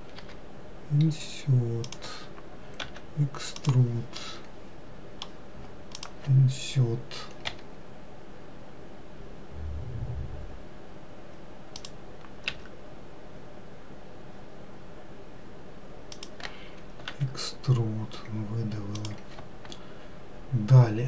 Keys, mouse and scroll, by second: 0.5 i, 3.1 e, 4.5-6.2 middle drag, 6.2 click, 7.8 i, 12.8 s, 17.4 e.